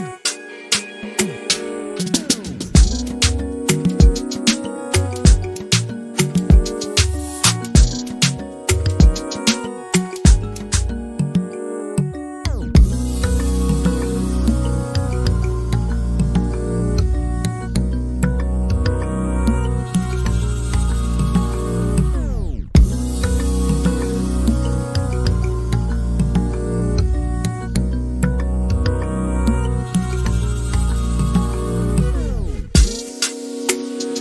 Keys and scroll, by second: 24.7-26.2 typing.